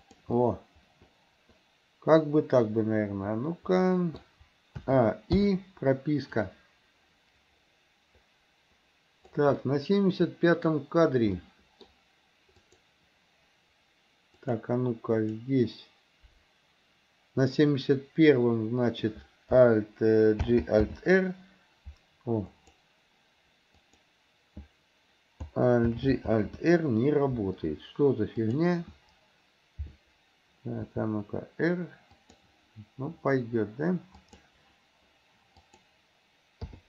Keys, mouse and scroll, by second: 0.4 middle click, 0.5-0.9 scroll down 1, 0.9 middle click, 1.9 scroll down 1, 1.9-4.4 middle drag, 4.9 a, 5.5 i, 6.5-9.5 drag, 9.6-10.7 middle drag, 11.4 middle click, 12.6 click, 14.5 click, 15.3 click, 20.5 alt+g, 20.9 alt+r, 22.6 click, 23.9 click, 26.0 alt+g, 26.4 alt+r, 28.5 click, 30.9 r, 34.3 click, 35.7 click, 36.7 i.